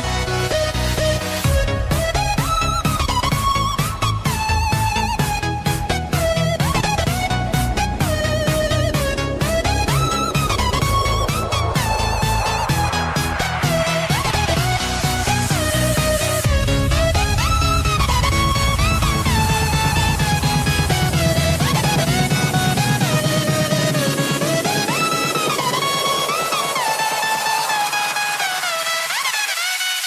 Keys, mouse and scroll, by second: 3.8-5.1 scroll up 1, 5.1 click, 7.1-7.6 scroll down 1, 10.2 click, 20.3 right click, 23.1 click, 25.7 ctrl+j, 27.1 click.